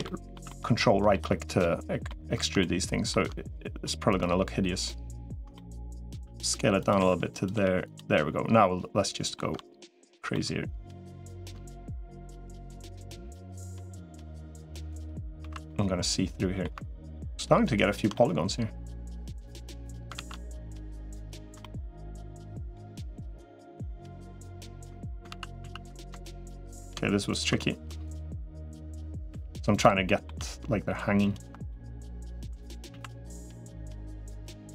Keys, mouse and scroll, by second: 0.3 shift+middle click, 1.5 middle click, 2.4 middle click, 5.4 middle click, 6.0 s, 6.8 r, 7.4 g, 8.0-9.2 middle drag, 9.8 right click, 10.2 middle click, 12.1 middle click, 13.7-15.1 middle drag, 15.2 alt+z, 15.5-16.5 middle drag, 17.4 ctrl+right click, 18.0-19.5 middle drag, 20.0 ctrl+z, 21.4 middle click, 22.3 middle click, 24.0 ctrl+right click, 25.2 ctrl+z, 25.4 ctrl+z, 26.2 ctrl+right click, 27.4 middle click, 28.6 r, 29.2 g, 29.9 middle click, 31.5 middle click, 32.8 alt+z, 33.2 middle click, 34.3 middle click.